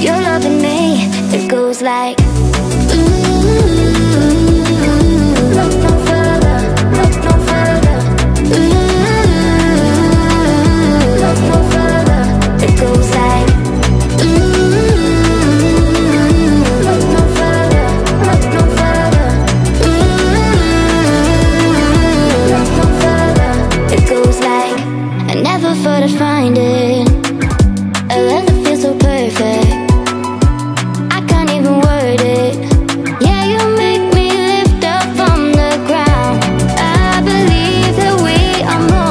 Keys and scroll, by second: 0.5 Right.